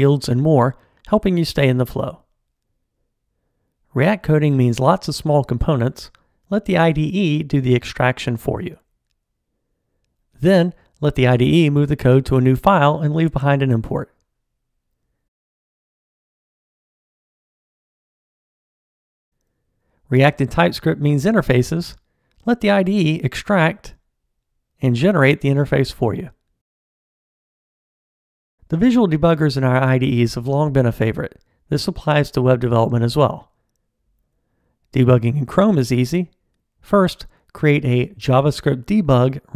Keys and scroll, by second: 3.7 ctrl+alt+t, 9.9 ctrl+alt+t, 11.4 F6, 17.5 super+e, 20.3 ctrl+alt+t.